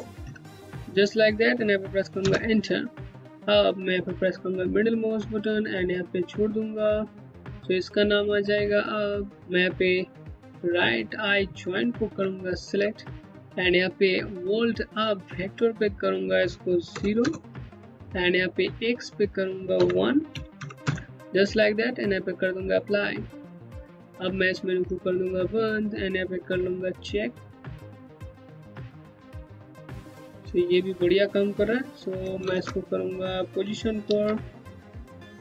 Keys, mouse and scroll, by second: 1.8 Return, 3.6 middle click, 11.0 middle click, 15.3 click, 16.5 KP_0, 16.8 KP_Enter, 18.4 click, 19.3 KP_1, 19.9 KP_Decimal, 20.2 KP_0, 20.4 KP_Enter, 22.3 click, 25.5 scroll up 1, 26.2 click, 28.8 Home, 32.0 ctrl+z, 33.7 alt+c, 34.6 click, 34.8 KP_0, 35.0 KP_Enter.